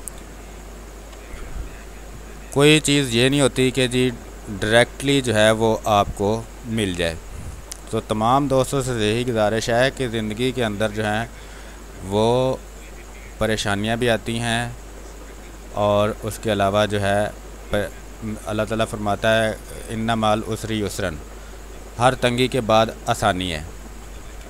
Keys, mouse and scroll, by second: 1.7 b, 3.7-6.6 drag, 6.6 space, 6.7 click, 7.0 space, 7.6 r, 7.7 click, 9.2 b, 9.2 space, 9.4 click, 9.7 space, 11.7 x, 13.7-16.3 drag, 16.3-18.0 drag, 18.0 space, 18.3 click, 18.5 space, 19.3 space, 20.7 space, 21.8-23.1 drag, 23.1 space, 23.3 click, 23.9 space, 24.1 ctrl+z.